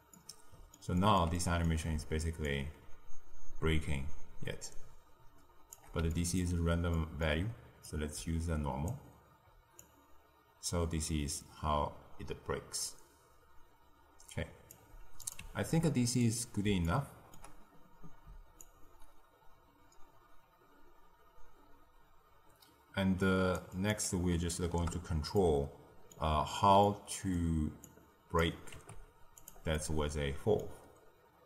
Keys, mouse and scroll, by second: 0.1-2.4 middle drag, 2.4-5.4 shift+drag, 6.1-7.8 ctrl+middle drag, 7.8 drag, 9.7-12.7 shift+drag, 15.2 click, 15.6 ctrl+x, 16.1-18.6 middle drag, 18.6-21.6 shift+drag, 23.7-25.3 drag, 25.3 middle click, 26.3-26.8 scroll down 1, 26.8-27.8 middle drag, 27.8 click, 28.7 g, 29.7-30.6 middle drag, 30.6-31.4 scroll up 5.